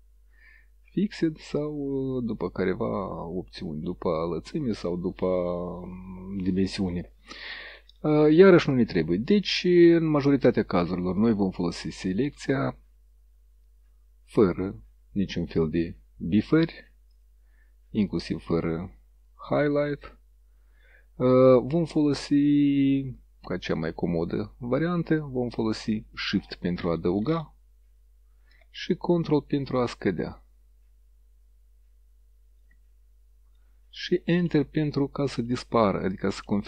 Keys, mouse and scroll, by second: 0.6 click, 6.5 click, 8.8 click, 11.3 click, 17.2 click, 19.3 click, 19.9 click, 21.5-24.4 drag, 25.3-26.2 drag, 27.3-28.4 shift+drag, 29.9-32.8 ctrl+drag.